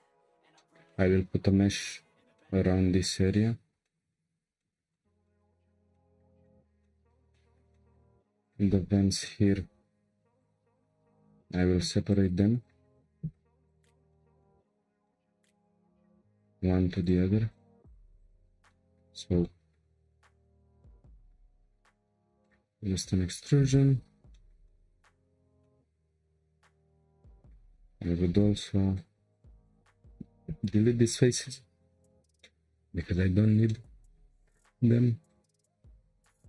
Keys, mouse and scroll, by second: 0.0 Tab, 0.6-4.2 shift+middle drag, 4.2 scroll down 2, 4.6-5.7 shift+middle drag, 5.7 scroll down 2, 5.9-8.1 shift+middle drag, 8.1-8.4 scroll up 3, 8.4 click, 8.8 Tab, 9.2-10.4 middle drag, 10.4 click, 12.6 c, 13.3 p, 14.1-14.7 shift+middle drag, 14.7-15.1 scroll down 1, 15.1-15.6 shift+middle drag, 15.6 click, 16.3 click, 17.0 click, 17.5 shift+click, 17.9 shift+click, 18.2 shift+click, 18.7-19.1 middle drag, 19.1 scroll up 1, 19.4 middle click, 20.1 e, 23.8 1, 24.3-27.7 shift+middle drag, 27.7-28.4 scroll up 1, 28.4 3, 29.8 shift+click, 30.2 shift+click, 30.7 Delete, 32.4-34.6 middle drag, 34.6 1, 35.3 click, 36.4 ctrl+click.